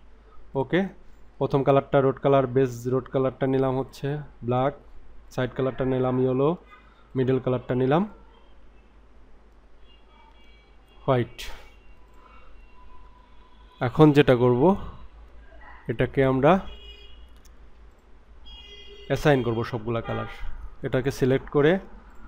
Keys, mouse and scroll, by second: 0.5 click, 3.8 click, 5.2 click, 7.1 click, 12.1 click, 17.9 click, 20.9 click, 22.1 click.